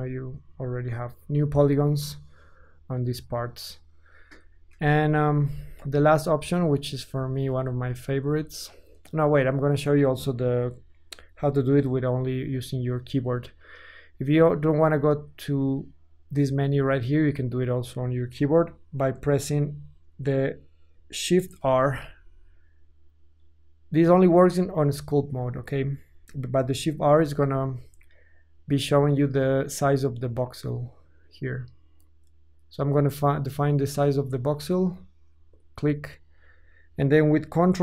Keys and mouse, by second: 4.7 KP_1, 5.5 ctrl+z, 6.1 ctrl+z, 6.4 ctrl+z, 6.8 ctrl+z, 6.8 ctrl+click, 7.3 ctrl+z, 7.7 ctrl+z, 8.9-16.7 drag, 16.7-27.0 middle drag, 21.6 shift+r, 27.0 shift+r.